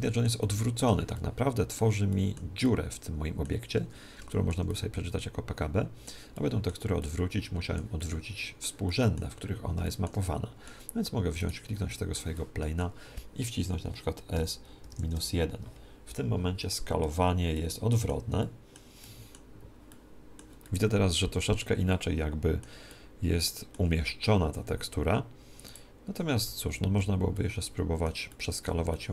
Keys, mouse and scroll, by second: 11.3-13.2 right drag, 14.2 s, 17.4-24.8 middle drag, 25.6-27.2 right drag, 26.6 alt+g, 27.2-29.1 middle drag.